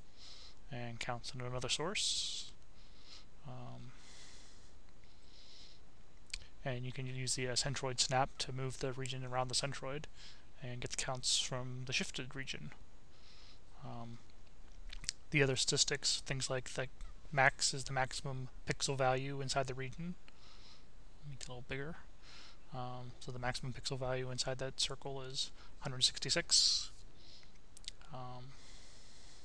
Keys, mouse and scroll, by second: 0.8 click, 6.4 click, 8.0 click, 9.9-11.0 drag, 13.5-15.8 drag, 16.4 click, 18.7-20.2 drag, 20.4 click, 21.5 click, 22.5-23.7 drag, 26.4 click, 27.8 click, 29.1 click.